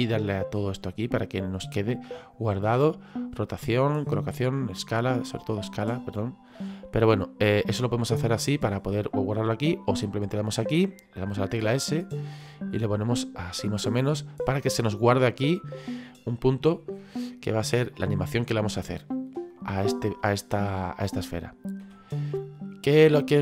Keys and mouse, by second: 0.2 click, 5.6 click, 7.4 click, 10.2 click, 13.8 click, 19.5 middle click, 21.8 KP_1.